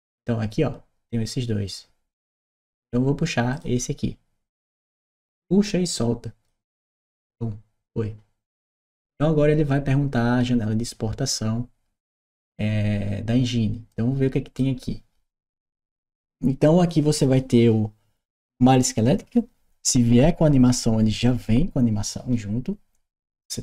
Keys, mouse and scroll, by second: 3.3 click, 4.7-6.2 drag, 13.7 click.